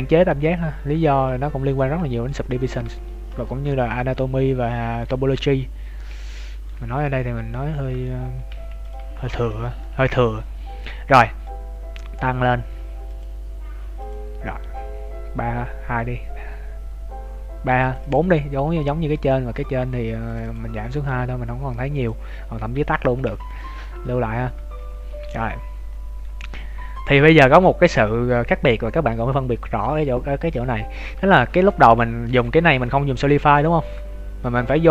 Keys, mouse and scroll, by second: 2.4 middle click, 2.6 shift+middle click, 2.8 z, 3.1-3.5 scroll down 2, 3.4 shift+middle click, 4.0 middle click, 5.1 z, 5.3 middle click, 6.7 z, 7.0 middle click, 8.2 Tab, 8.6 ctrl+s, 9.0 z, 9.1 scroll down 2, 9.5 shift+middle click, 9.8 middle click, 13.1 click, 17.7 click, 19.2 right click, 20.2 click, 20.9 right click, 21.9 click, 23.3 ctrl+s, 23.7 scroll up 4, 24.3 scroll down 1, 24.5 Tab, 24.9-25.3 scroll down 3, 25.1 Tab, 25.3 middle click, 30.4 right click, 31.9 scroll up 1, 31.9 middle click, 32.4 z, 32.7 middle click, 33.3-34.0 scroll up 7, 33.9 z, 34.4 middle click.